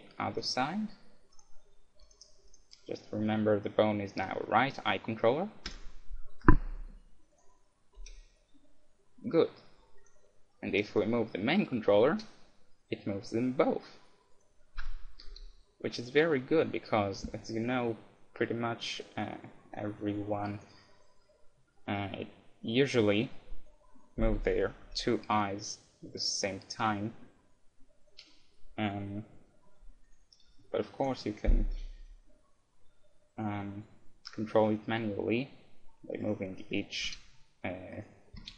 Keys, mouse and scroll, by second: 1.3-4.3 drag, 7.3-9.0 right drag, 8.0 g, 10.1-12.8 right drag, 12.0 g, 14.4-16.4 right drag, 14.8 KP_1, 15.3 g, 20.7-22.3 right drag, 22.0-23.7 middle drag, 24.8 KP_1, 25.3 g, 30.6-32.4 middle drag, 31.0-32.9 right drag, 34.5 g, 36.7-38.5 right drag, 37.0 g, 38.3 g.